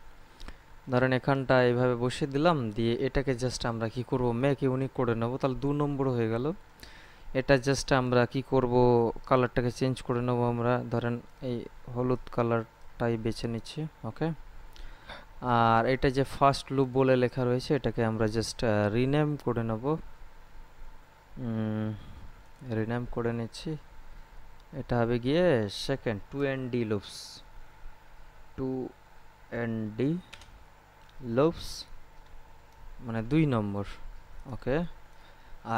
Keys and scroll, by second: 26.3 BackSpace, 28.3 2, 29.4 n, 29.9 d, 30.1 space, 32.4 BackSpace.